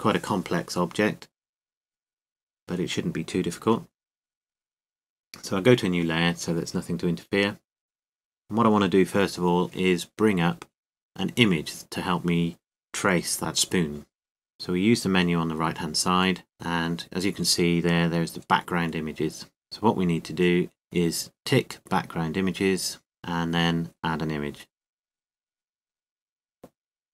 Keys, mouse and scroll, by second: 6.7-8.5 drag, 8.5-9.9 middle drag, 8.9 KP_7, 10.6 n, 15.0-16.3 middle drag, 23.1-27.1 drag.